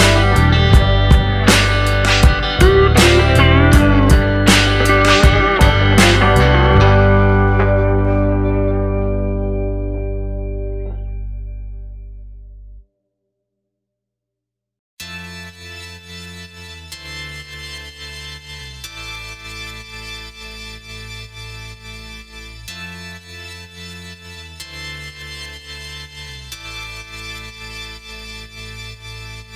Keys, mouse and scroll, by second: 0.2 click, 0.8 shift+f, 2.1 click, 2.9 click, 3.5 click, 5.2 scroll down 2, 5.4 middle click, 6.8-7.3 scroll up 3, 7.3 middle click, 8.3 click, 9.3 click, 14.9 click, 15.9 click, 16.7 click, 17.2 click, 17.7 click, 18.1 click, 18.3 click, 18.6-19.8 scroll down 3, 18.8 middle click, 21.0-21.9 scroll up 1, 21.9 click, 23.3 click, 24.0 click, 24.6 click, 25.2 click, 25.7 click, 27.0 click, 27.4 click, 28.0 click, 28.5 click, 29.0 click.